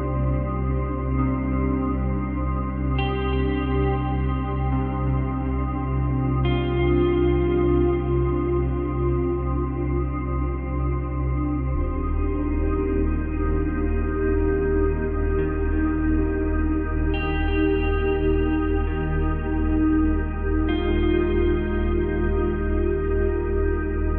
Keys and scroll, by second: 0.5 space.